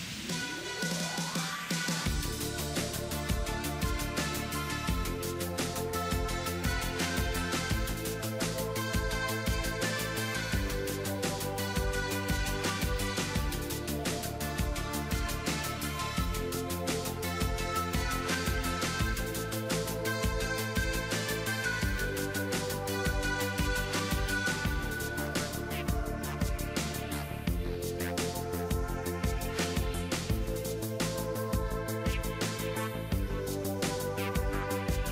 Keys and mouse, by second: 1.1 e, 2.2 e, 3.2 e, 5.0 KP_3, 5.9 middle click, 6.5 z, 8.3 click, 8.5 click, 11.3-13.5 drag, 19.4 KP_7, 20.3 z, 20.7 z, 21.3 z, 22.9 KP_3, 24.8 z, 25.6 g, 28.1-31.8 right drag, 29.3 a, 29.8 b, 30.7 g, 32.6 a, 33.7 g, 34.0-35.1 drag, 34.6 b.